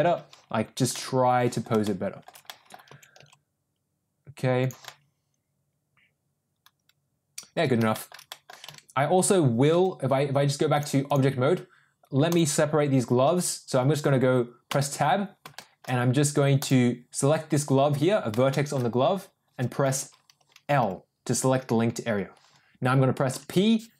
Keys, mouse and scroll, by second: 0.3 ctrl+z, 0.8 middle click, 1.8-2.2 shift+middle drag, 2.4 middle click, 2.8 r, 4.8-7.5 middle drag, 7.8 shift+middle drag, 8.2 middle drag, 8.6 Tab, 9.8 Tab, 10.7 click, 12.2 click, 14.6 Tab, 15.4 shift+middle click, 16.5 click, 18.5 shift+middle click, 20.7 l, 23.2 p.